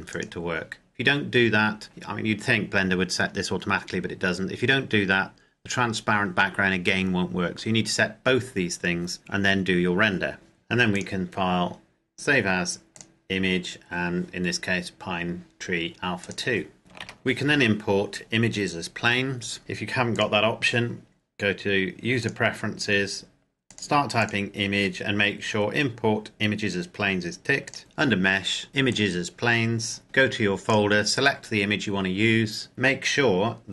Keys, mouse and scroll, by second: 10.6 click, 15.9 click, 16.8 shift+a, 19.8 click, 27.5 click, 27.8 shift+a, 28.7 click, 30.4 click.